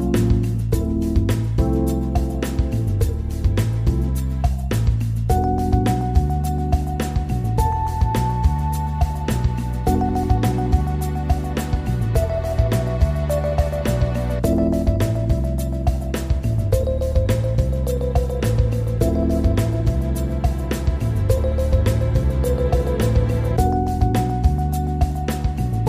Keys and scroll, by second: 4.9 Delete, 5.9 ctrl+0, 13.3 ctrl+=, 19.3 ctrl+z, 23.6 ctrl+=.